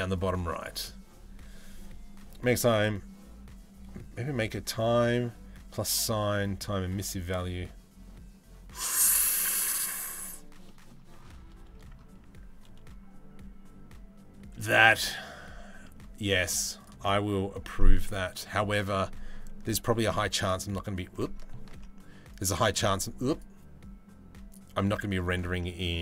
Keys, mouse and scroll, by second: 10.3 middle click, 14.4 shift+middle click, 17.4-17.9 middle drag, 18.3 middle click, 19.5 h, 21.3 ctrl+z, 21.9 click, 22.2 click, 22.9 click, 24.1 click, 25.2 middle drag, 25.6 z.